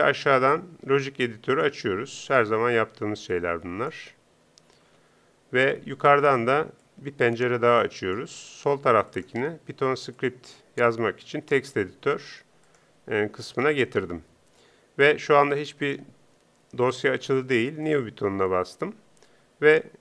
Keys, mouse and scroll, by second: 4.9 Home.